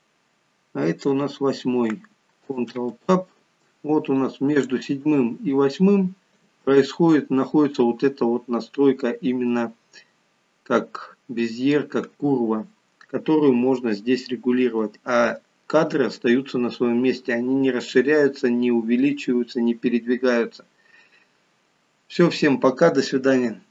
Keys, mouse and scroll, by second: 2.8 ctrl+Tab, 4.4 click, 5.7 click.